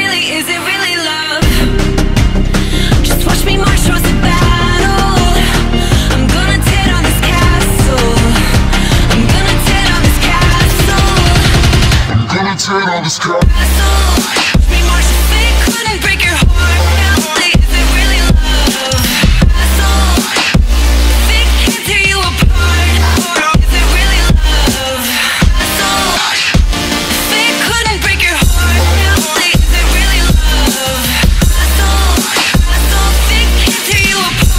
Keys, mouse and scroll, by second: 0.0 alt+click, 2.1 click, 2.8-4.2 drag, 5.3 click, 6.2 alt+click, 8.7-9.0 alt+drag, 12.5 click, 12.9-13.5 alt+drag, 13.5 alt+right click, 13.6-14.3 alt+drag, 14.6 alt+click, 17.1 click, 17.2 click, 17.7 click, 21.9 alt+click, 22.6 alt+click, 23.3-25.2 alt+drag, 25.2 u, 28.0-29.4 drag, 29.4 g, 33.6 click, 33.8-34.5 alt+drag.